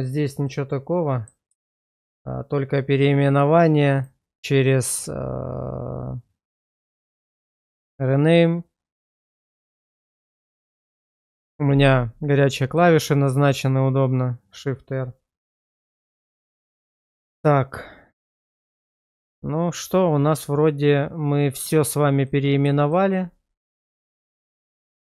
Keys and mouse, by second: 0.4 middle click, 1.7 shift+middle click, 4.1-10.1 drag, 10.8 middle click, 12.7-14.6 drag, 15.4 middle click, 22.8 shift+click, 23.8-25.1 middle drag.